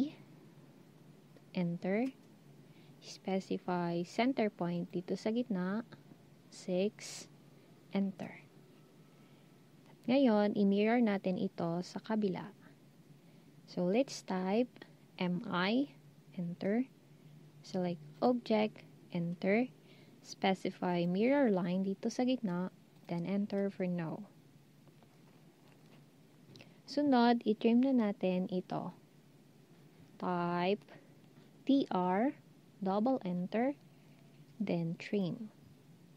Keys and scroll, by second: 6.8 typing, 14.9-15.6 typing, 18.9 Return, 31.3-32.1 typing.